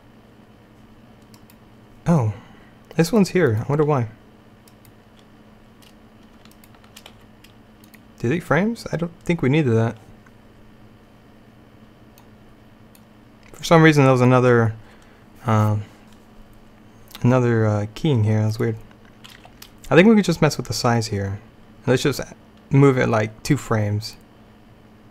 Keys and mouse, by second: 1.9-7.7 drag, 7.2 x, 10.7-12.3 middle drag, 12.3-19.5 drag, 19.5 g, 24.2-25.1 drag.